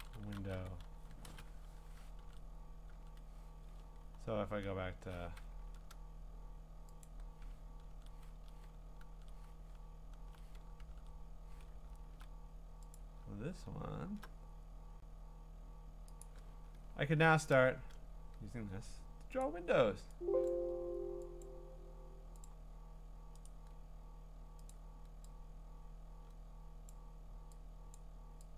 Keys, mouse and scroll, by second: 0.0-1.1 typing, 1.3 Return, 2.2 ctrl+Tab, 2.2 typing, 2.9 ctrl+Tab, 3.8-5.0 scroll, 5.6 ctrl+w, 7.1 click, 7.9 ctrl+Tab, 9.0 ctrl+Tab, 9.8-10.8 scroll, 10.8 ctrl+Tab, 11.7-12.3 ctrl+scroll, 13.0 click, 13.3-15.1 ctrl+scroll, 16.2 click, 16.8-17.2 scroll, 19.4 click, 20.5 click, 21.4 click, 22.4 click, 23.4 right click, 25.4 click, 26.9 click.